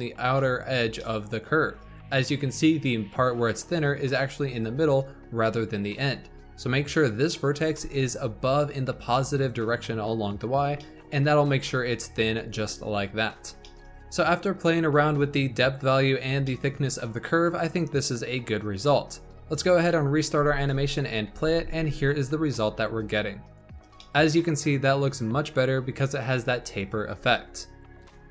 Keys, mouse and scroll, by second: 2.3-5.3 scroll down 2, 6.3-7.3 scroll up 2, 7.6 g, 10.7-15.0 shift+middle drag, 15.0 click, 16.4-17.2 shift+middle drag, 17.2-18.6 scroll up 1, 18.6 scroll down 1, 19.6-20.3 drag, 20.3 space, 21.3 z, 23.9-26.9 shift+middle drag.